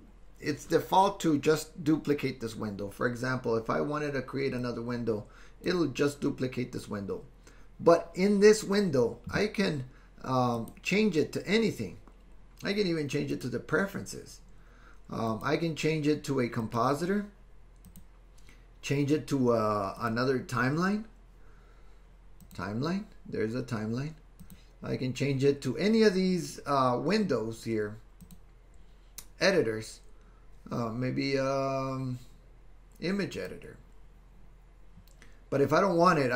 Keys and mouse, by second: 4.7 click, 10.6-13.4 drag, 15.3-16.8 drag, 18.0 click, 20.0-22.6 drag, 24.5-27.0 drag, 28.2-33.6 drag.